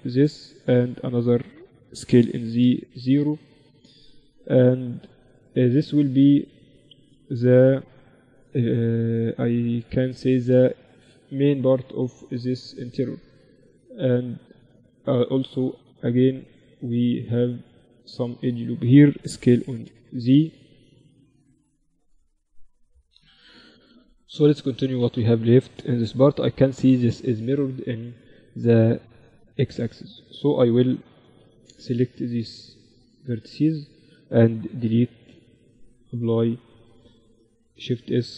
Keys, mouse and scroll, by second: 1.2 s, 2.8-4.7 drag, 10.5-14.2 drag, 14.2 ctrl+r, 18.4 s, 21.3-22.3 drag, 23.2 a, 24.2 a, 24.7 a, 25.4 b, 30.0 a, 30.5 a, 30.7 b, 34.0 x, 35.5 Tab, 35.8 Tab, 36.4-38.3 right drag, 37.0 shift+s, 38.2 Tab.